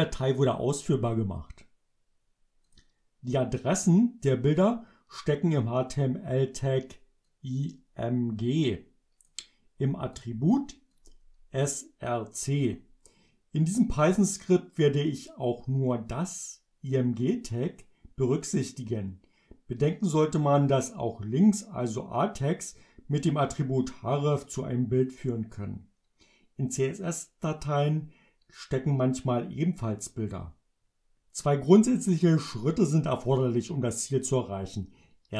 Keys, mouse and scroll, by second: 2.8 click, 7.3-9.5 drag, 10.2 click, 11.0-12.3 drag.